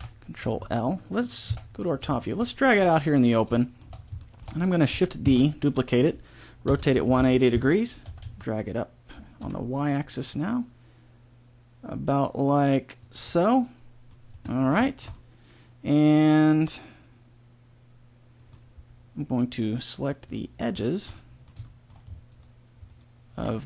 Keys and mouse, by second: 1.4 KP_7, 3.6 middle click, 5.3 shift+d, 6.7 r, 8.0 g, 13.3 middle click, 14.3 a, 16.2 middle click, 20.2-22.3 middle drag.